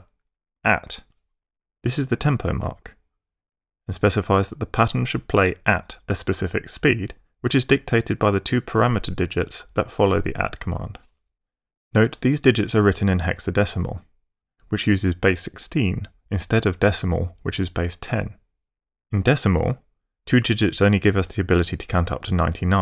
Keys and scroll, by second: 0.5 @.